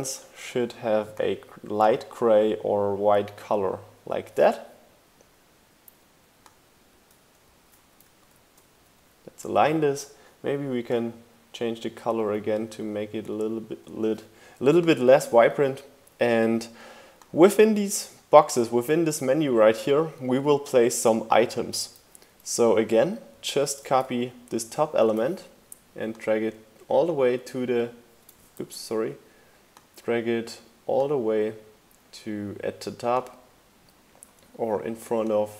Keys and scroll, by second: 7.9 shift+Up, 8.5 Down, 23.4 super+c, 23.6 super+v, 24.0 shift+Down, 28.3 super+z.